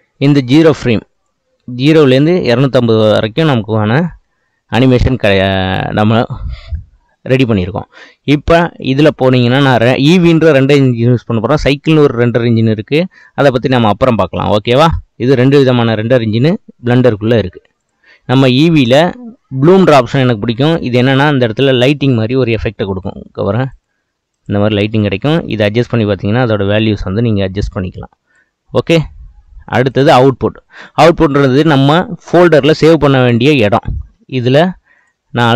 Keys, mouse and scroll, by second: 1.2-4.3 drag, 8.8 click, 10.4-13.6 drag, 23.8 click, 24.4 click, 25.6-28.6 drag, 29.8 click, 34.9 click.